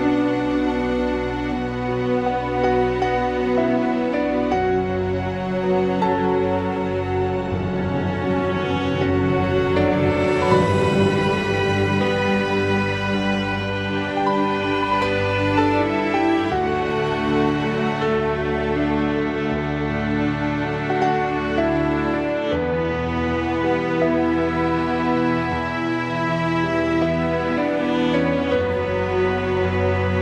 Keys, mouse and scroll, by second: 0.3 r, 2.2 click, 4.5 s, 5.8 shift+click, 6.9 g, 11.4 shift+click, 11.8 shift+click, 12.4-13.7 middle drag, 13.7 shift+click, 14.5 shift+click, 15.1-15.8 drag, 15.8-16.4 middle drag, 16.4 click, 17.0 1, 17.9 click, 18.2 g, 19.2 g, 19.8 click, 20.7 g, 21.5 click, 22.1 g, 24.1-24.8 drag, 25.1 s, 26.5 click, 27.3 click, 29.5 r.